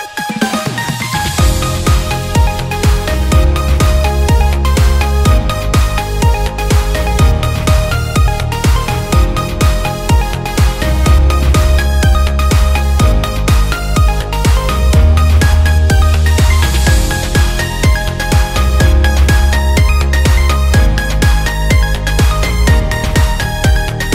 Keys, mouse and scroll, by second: 0.4 click, 1.2-4.3 typing, 4.8 click, 5.0 click, 5.5 e, 5.9 click, 6.1 click, 8.3 e, 9.3 alt+click, 9.7 e, 10.7 click, 11.0 alt+click, 11.5 e, 12.0 e, 12.7 alt+click, 13.2 e, 13.6 click, 13.9 click, 14.0 e, 14.4 click, 18.0 click, 18.8 Tab, 19.1 click, 19.7 click, 20.4 click, 20.7 click, 21.2 click, 21.6 click, 22.3 alt+click, 22.4 ctrl+z, 22.9 click.